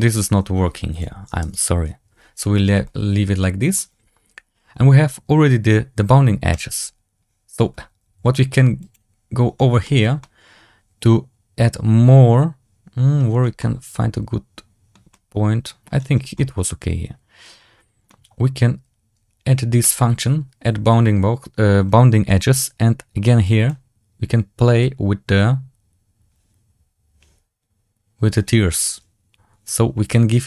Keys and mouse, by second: 0.8 click, 2.7-3.6 middle drag, 6.6-7.4 drag, 9.8 shift+middle drag, 10.1-13.1 middle drag, 13.5-14.8 middle drag, 15.0-15.7 middle drag, 16.2-17.4 middle drag, 17.4 click, 19.9-30.4 drag.